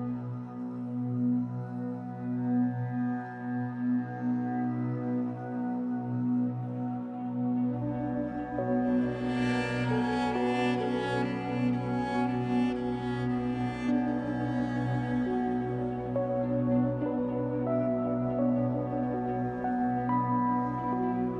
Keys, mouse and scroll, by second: 8.0-8.4 scroll down 2, 8.4-11.3 middle drag, 9.4-9.9 scroll up 2, 11.3-12.6 drag, 13.8 click, 15.2 click, 15.9-21.3 middle drag, 18.1 scroll down 1, 18.9-19.5 scroll up 1.